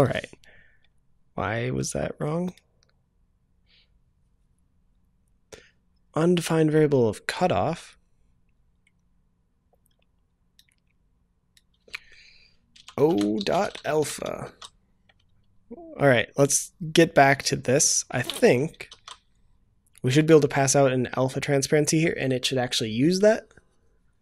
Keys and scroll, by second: 14.4 ctrl+s, 18.9 ctrl+s.